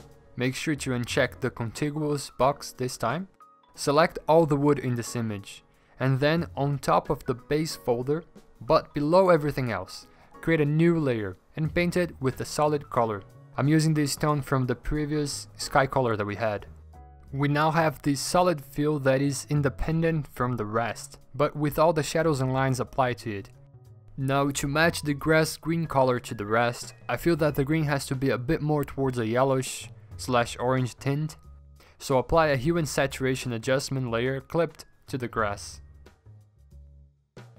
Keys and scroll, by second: 1.5 ctrl+d, 2.9 w, 16.9 alt+BackSpace, 17.8 ctrl+d, 17.9 v, 25.1 ctrl+i, 26.7 ctrl+i, 29.5 ctrl+alt+g, 35.7 v, 37.2 ctrl+e.